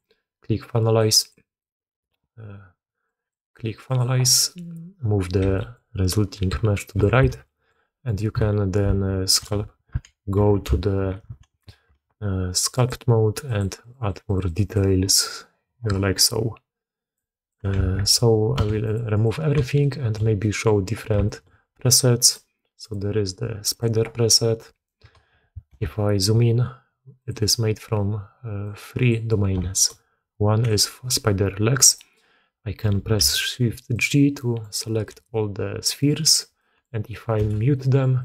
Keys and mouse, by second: 3.0-4.8 drag, 5.3 g, 7.2 alt+a, 7.3-7.6 drag, 8.0 click, 10.6 ctrl+shift+q, 11.5 ctrl+Tab, 13.4 click, 13.7 click, 14.0 click, 14.2 click, 14.6 click, 15.1 middle click, 17.2 click, 17.7 a, 18.5 x, 19.7-20.1 shift+drag, 20.3 middle drag, 21.2 shift+middle drag, 22.1-22.8 drag, 23.7 click, 24.6 drag, 25.6 KP_Decimal, 28.7 middle click, 29.6 shift+middle click, 30.6-32.1 drag, 33.1 shift+g, 34.3 drag, 35.0 g, 36.5 click, 37.3 m, 37.6-37.9 drag, 38.1-38.2 drag.